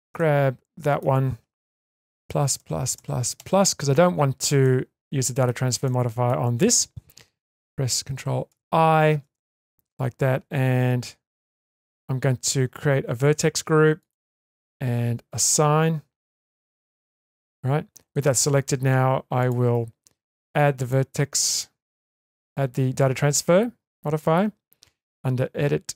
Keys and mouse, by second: 0.1 middle click, 4.6 middle click, 5.9 middle click, 11.3 click, 14.0 click, 15.3 click, 16.8 Tab, 20.8-25.9 drag.